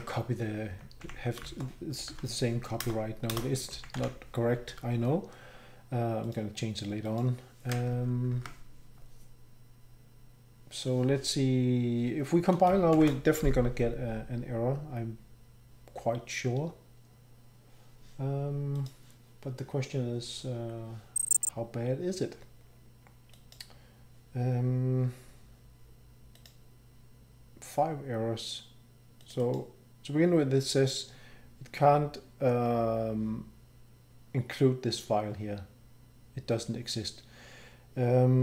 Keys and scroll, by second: 0.0 ctrl+Tab, 0.0-1.5 shift+End, 0.0 ctrl+c, 0.7 Home, 1.5 shift+Down, 2.1 ctrl+v, 2.8 Return, 3.3 Return, 4.0 Delete, 8.3 ctrl+Tab, 12.9 ctrl+shift+b.